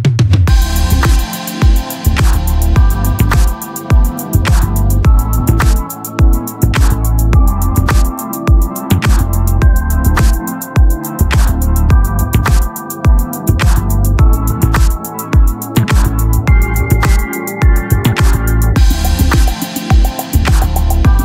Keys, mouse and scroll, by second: 1.4 ctrl+b, 3.6 e, 4.4-5.7 right drag, 5.0 i, 6.6 s, 8.2 s, 9.2 s, 10.9 s, 12.8-15.4 drag, 15.5-17.4 middle drag, 16.1 s, 17.6 s, 18.8-19.4 ctrl+z, 20.0 ctrl+z, 21.1 Tab.